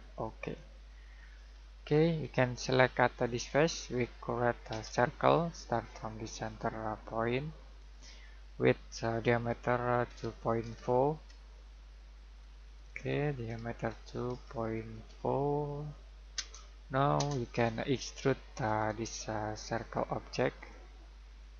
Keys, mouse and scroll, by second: 1.5-3.5 scroll down 1, 3.5 click, 4.7 c, 7.8 click, 10.0-11.6 typing, 12.6 BackSpace, 13.7-15.4 typing, 16.3 Return, 18.5 click.